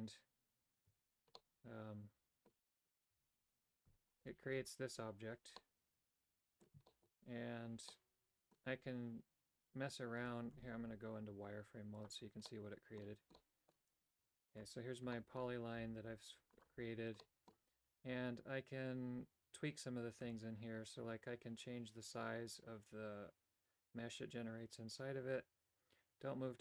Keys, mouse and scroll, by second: 0.8 Tab, 1.3-2.5 middle drag, 3.1 Tab, 3.8 Tab, 4.1 right click, 4.5 Tab, 5.5-6.6 middle drag, 6.9 shift+middle click, 7.9 middle click, 10.1 Tab, 10.5 z, 12.6 middle click, 13.4 middle click, 14.5 right click, 15.1 shift+middle click, 15.7 g, 17.1 middle click, 20.3-26.6 shift+drag.